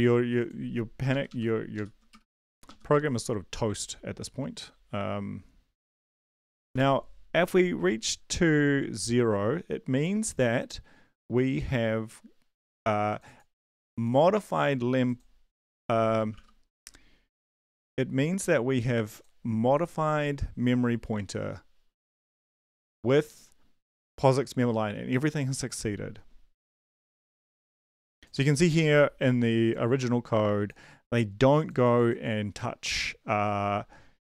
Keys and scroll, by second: 1.1 shift+Up, 1.2 shift+Up, 1.7 shift+Up, 2.1 BackSpace, 2.3 BackSpace, 2.6 Up, 2.9 End, 6.7 space, 15.7-17.2 typing.